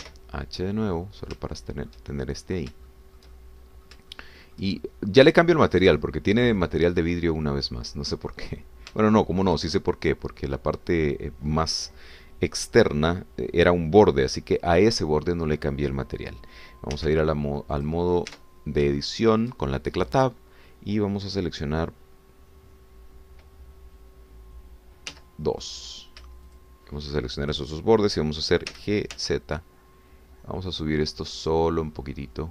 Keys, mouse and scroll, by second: 1.0 h, 1.7 click, 2.5 shift+click, 3.2-3.7 shift+scroll up 1, 3.9-5.0 shift+drag, 5.1 shift+click, 5.8 shift+click, 6.5 shift+click, 9.4 click, 10.1-11.7 shift+drag, 18.5 Tab, 19.0 click, 19.3 Tab, 20.0 shift+click, 26.1 2, 26.7 click, 27.6 shift+click, 29.7 g, 30.1 z.